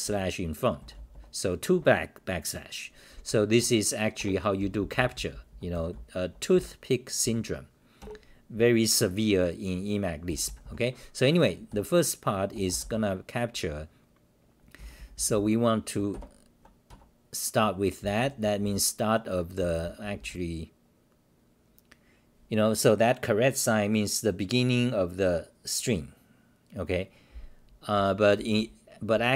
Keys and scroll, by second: 0.0-1.4 typing, 3.6 Home, 4.2 ctrl+g, 4.6-6.4 typing, 8.0 ctrl+g, 10.2 h, 11.7 ,, 14.8 h, 16.9 Home, 18.0 n, 18.2 n, 19.6 h, 28.0-29.3 typing.